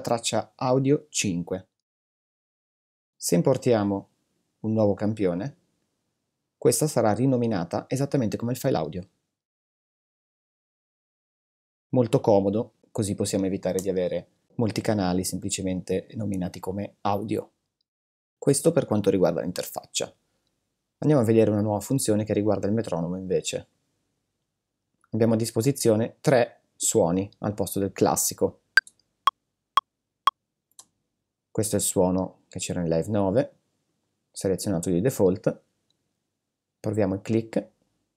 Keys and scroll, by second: 13.6 super+t, 28.7 space, 30.6 space.